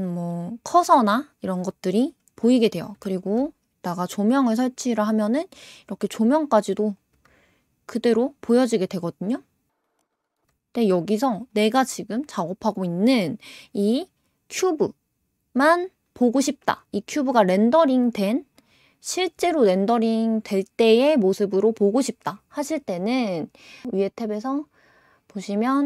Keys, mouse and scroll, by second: 3.0 shift+a, 5.2 shift+a, 6.0 scroll down 5, 6.9 click, 7.2 g, 9.7 scroll up 5, 9.9-10.2 scroll down 4, 10.2 scroll up 3, 10.3 scroll down 1, 10.4 g, 11.5 scroll up 2, 11.8 click, 23.8-25.8 scroll down 9.